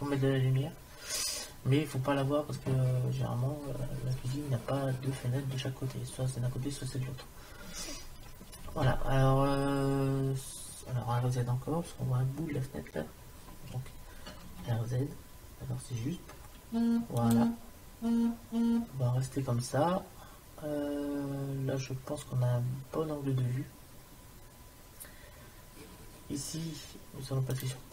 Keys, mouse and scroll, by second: 14.4 r, 27.5-27.9 drag.